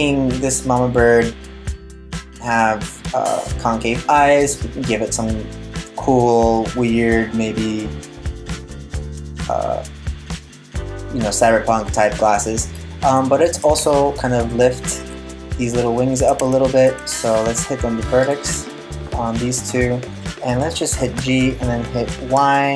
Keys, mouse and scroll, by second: 12.7 right click, 13.4 Tab, 14.1 right click, 14.6 right click, 16.0 Tab, 16.5 Tab, 17.8 click, 19.0 right click, 20.8 g.